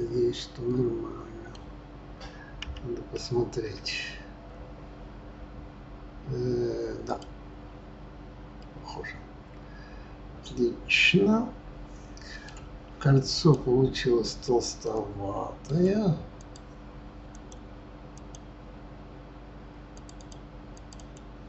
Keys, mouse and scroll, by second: 2.6 KP_3, 3.6 KP_1, 4.8-6.6 scroll up 3, 7.0 click, 8.6-11.6 middle drag, 13.3 click, 14.8-16.3 middle drag, 16.3 click, 17.3-20.1 drag, 20.2 click, 20.7 click, 20.9 click.